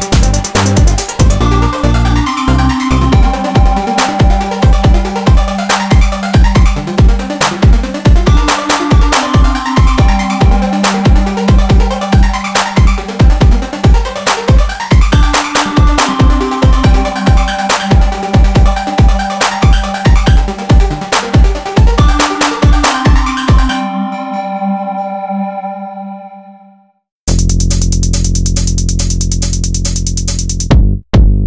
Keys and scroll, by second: 19.9 ctrl+e, 24.9 ctrl+e, 29.1 ctrl+1, 30.3 alt+s.